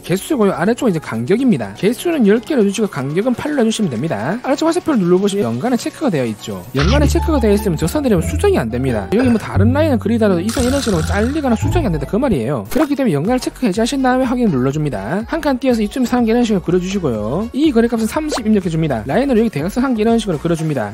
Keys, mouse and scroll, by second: 1.8 1, 3.4 click, 5.2 click, 9.3 click, 9.9 click, 10.9 x, 11.1 click, 11.5 click, 11.9 click, 12.2 click, 14.2 click, 14.9 click, 15.7 1, 16.4 click, 17.5 click, 17.9 click, 18.3 click, 18.6 3, 19.2 1, 20.4 click.